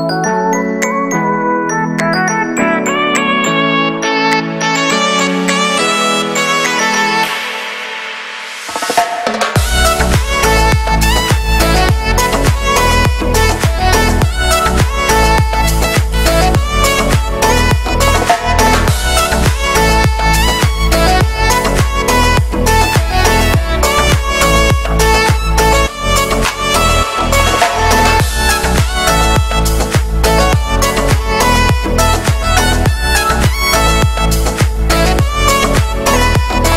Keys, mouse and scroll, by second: 4.0-5.3 middle drag, 5.3 a, 6.0 shift+n, 6.6 Tab, 7.2 middle click, 8.1 right click, 8.5 Tab, 9.0 right click, 9.8 click, 10.2 right click, 10.8 shift+d, 11.5 e, 12.9 shift+middle click, 13.1-13.8 scroll up 1, 13.8 scroll up 1, 13.9 click, 14.3 right click, 14.5 scroll down 2, 14.6 shift+middle click, 14.9 scroll up 2, 15.0 e, 18.6 scroll down 1, 18.8 shift+middle click, 18.9 scroll up 2, 19.3 middle click, 19.5-19.9 scroll up 1, 19.9 ctrl+r, 23.6 scroll down 3, 23.8 shift+middle click, 24.5 ctrl+r, 26.0-26.7 scroll up 2, 26.3 shift+middle click, 26.7 ctrl+b, 28.2-28.5 scroll down 2, 28.5 shift+middle click, 28.7-29.5 scroll up 1, 29.5 click, 29.9 z, 31.6 middle click, 31.9 b, 32.3 shift+middle click, 32.6 scroll up 1, 32.7 x, 33.5 z, 33.8 shift+middle click, 34.6 click, 34.8 scroll up 2, 35.1 right click, 35.2-36.7 typing, 35.7 scroll down 2, 35.9 shift+middle click, 36.3 right click.